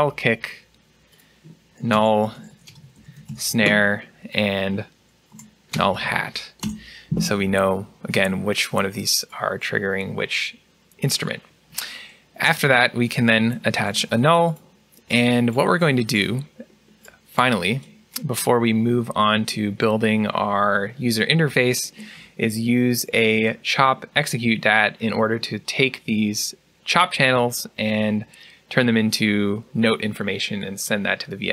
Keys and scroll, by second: 1.8-2.2 typing, 4.9-7.0 typing, 13.6 alt+n.